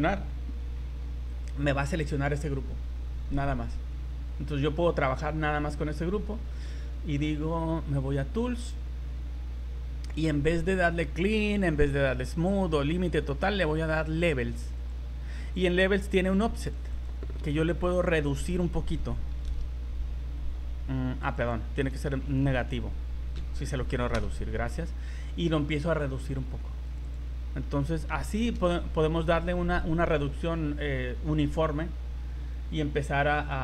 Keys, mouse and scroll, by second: 1.3 click, 6.6 middle click, 8.0 click, 8.5-9.1 scroll down 13, 14.8 click, 16.7 click, 21.2 click, 22.2 Left, 22.4 Left, 26.8 click, 33.4 click.